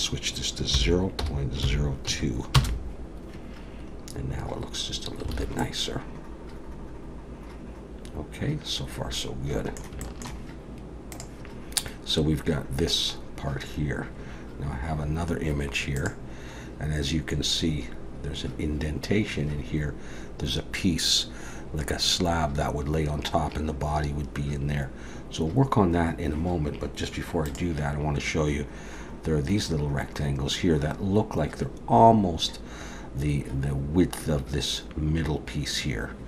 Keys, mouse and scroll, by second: 3.9 scroll up 2, 4.9-5.3 scroll down 2, 5.3 alt+a, 5.6 middle click, 10.0 shift+middle click.